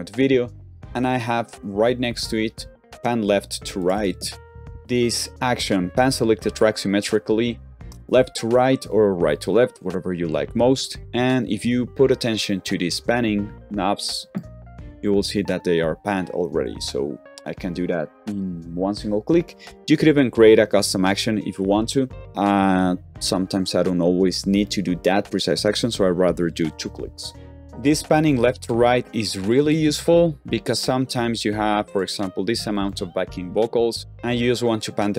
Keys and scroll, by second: 29.5 super+a, 29.8 z.